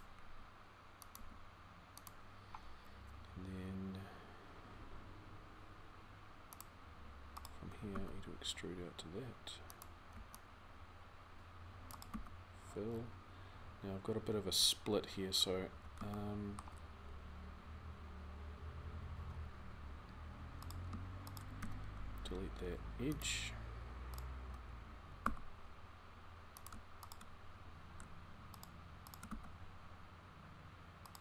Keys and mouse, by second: 0.1 r, 0.9 g, 7.8 e, 9.9 c, 11.9 f, 15.7-21.4 middle drag, 21.4 x, 25.1 e, 29.1 f.